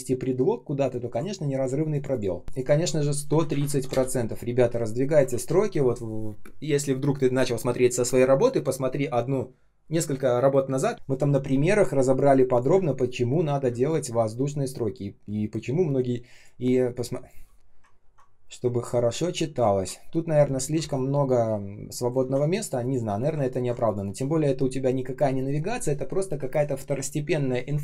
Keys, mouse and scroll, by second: 3.6 shift+5, 3.8 Return, 5.2 ctrl+s, 12.6 space, 13.6 space, 14.1 space, 17.9 ctrl+scroll down 1, 19.6 ctrl+scroll up 1, 20.7 r, 22.1 ctrl+z, 23.4 ctrl+scroll down 1.